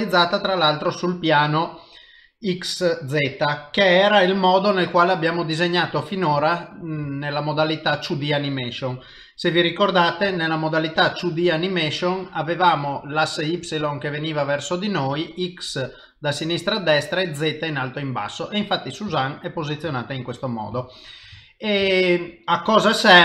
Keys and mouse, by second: 0.6 middle click, 0.7 ctrl+middle click, 2.5 middle click, 4.1 middle click, 5.9 middle click, 6.4 shift+middle click, 7.1 ctrl+middle click, 7.7 middle click, 10.2 KP_3, 10.9 KP_1, 18.3 middle click, 19.2 shift+middle click, 20.2 ctrl+middle click, 20.8 shift+middle click, 21.4 ctrl+middle click, 21.9 shift+middle click, 23.0 ctrl+middle click.